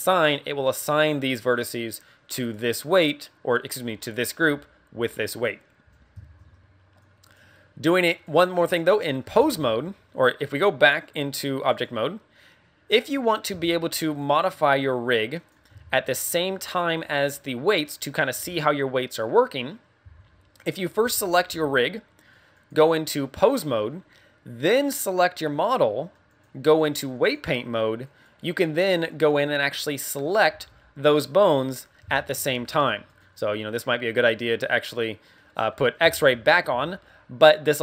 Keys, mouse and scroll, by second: 7.0 click, 7.8 click, 8.5 scroll down 3, 8.9 middle click, 9.3 ctrl+Tab, 11.0 click, 13.0 middle click, 13.5 z, 13.7 middle click, 14.2 right click, 15.3 click, 15.6 z, 15.9 middle click, 19.9 z, 21.0 z, 22.5 click, 25.0 right click, 27.3 click, 28.1 right click, 28.8 right click, 28.8 right click, 29.2 right click, 29.8 middle click, 30.5 r, 31.1 right click, 31.6 right click, 32.1 shift+middle click, 32.6 r, 33.2 right click, 35.3 middle click, 36.1 middle click, 36.4 middle click, 36.7 z, 37.5 right click.